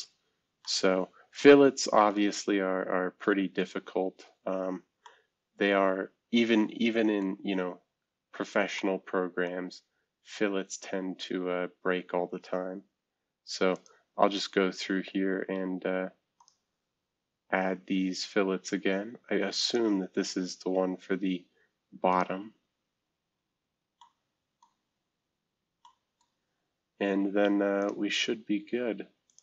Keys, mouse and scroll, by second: 0.6-2.1 middle drag, 2.3 middle click, 2.4-4.5 scroll up 2, 5.0-7.7 middle drag, 7.7-8.3 scroll down 2, 8.3-9.4 scroll up 2, 8.7-11.0 middle drag, 9.5 scroll down 2, 9.5 scroll up 2, 13.7 click, 16.4 click, 19.6 click, 22.1 click, 24.0-27.7 middle drag, 26.4-27.7 scroll up 2, 29.2 click.